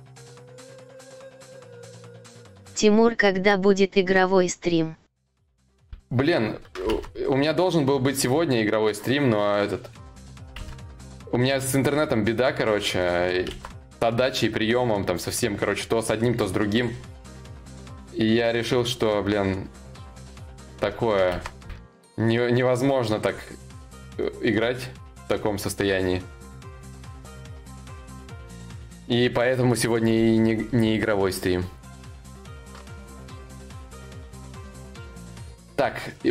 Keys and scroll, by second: 10.1 ctrl+z, 32.4 ctrl+s.